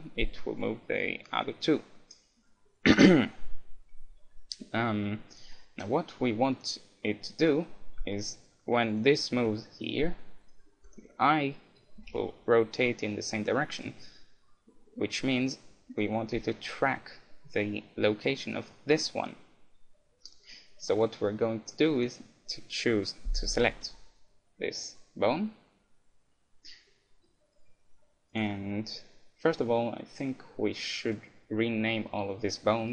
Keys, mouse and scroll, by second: 0.8-2.0 right drag, 1.5-3.8 middle drag, 4.8-7.4 middle drag, 7.5-8.9 middle drag, 8.9-12.8 right drag, 9.2-10.4 middle drag, 9.4 g, 12.0 r, 13.8-15.6 right drag, 15.0-16.8 middle drag, 15.9-17.8 right drag, 16.3 g, 21.4-23.2 middle drag, 21.4-24.0 right drag, 27.3-29.0 middle drag, 28.3-30.0 drag.